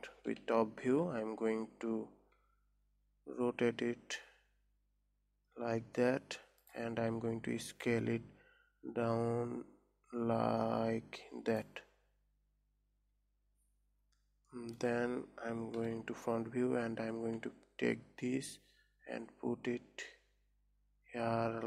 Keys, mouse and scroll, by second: 0.8 KP_7, 1.5 scroll up 2, 3.3 r, 7.7 s, 15.1-16.3 middle drag, 16.3 KP_1, 17.0 scroll up 3, 17.8 g.